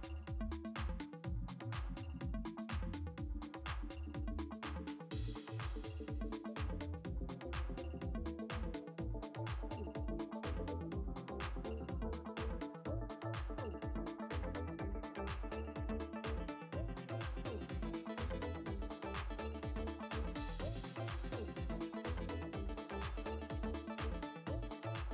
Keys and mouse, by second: 17.0 click, 19.0 f, 20.9 click, 22.1 click, 24.4 g.